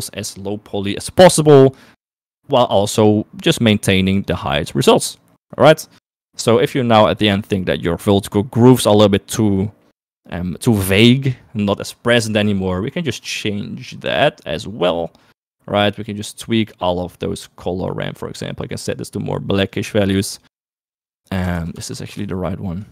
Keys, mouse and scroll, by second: 4.6 click, 5.9 middle click, 6.3 middle click, 10.1 middle click, 12.2 middle click, 13.5-14.5 middle drag, 15.1-16.8 middle drag, 18.4 middle click, 22.2 ctrl+z, 22.6 ctrl+shift+click.